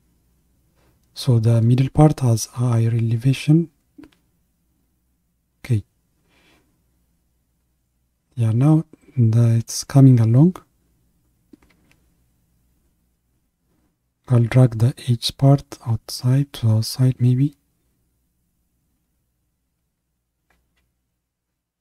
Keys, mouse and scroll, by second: 4.7-7.7 middle drag, 9.8-12.5 middle drag, 12.5-17.8 drag, 17.8 KP_1, 18.9 ctrl+KP_1.